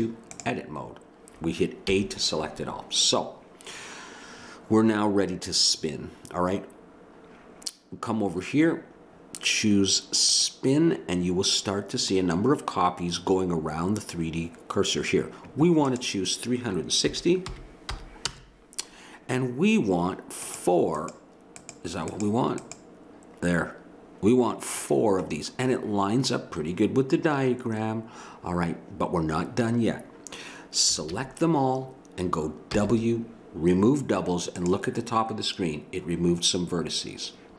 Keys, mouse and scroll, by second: 1.9 a, 10.3-12.0 drag, 15.9-18.3 drag, 20.5-25.3 drag, 30.9 a, 31.1 a, 32.7 w.